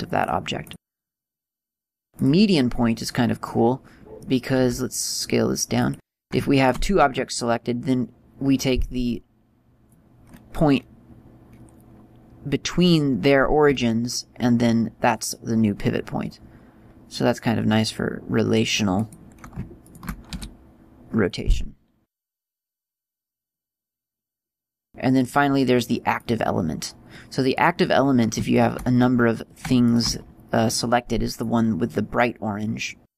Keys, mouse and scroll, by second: 1.3 click, 3.8 middle click, 4.9 s, 6.2 click, 6.9 shift+right click, 20.2 shift+right click, 20.6 r, 23.8 click, 25.5 click, 27.9 right click, 28.9 shift+right click, 32.0 scroll up 2.